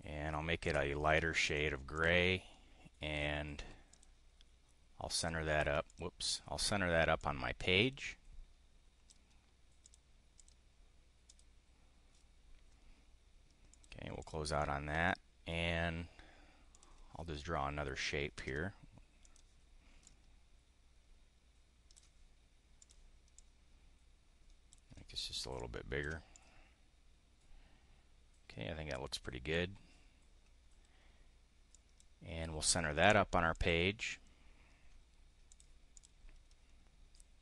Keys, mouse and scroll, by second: 0.6 click, 1.4 click, 1.9 click, 3.8 click, 5.1 click, 5.8 click, 7.1-9.2 drag, 9.8 click, 10.4 click, 11.3 click, 13.6 click, 14.0 click, 15.0 click, 16.6 click, 19.2 click, 19.9-22.0 ctrl+drag, 22.8 click, 23.2-24.7 drag, 25.5 ctrl+click, 26.2-29.7 drag, 31.7 click, 33.0 click, 33.6 click, 35.5 click, 35.8 click.